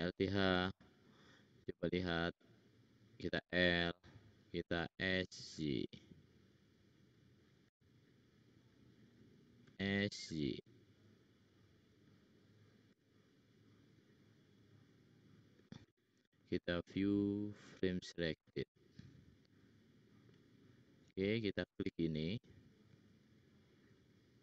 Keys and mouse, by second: 0.2 alt+h, 2.4 click, 3.6 l, 4.9 s, 7.8 middle click, 8.7 middle click, 9.7 s, 12.8 s, 14.5 click, 21.2 click, 21.5 click, 23.3 shift+click.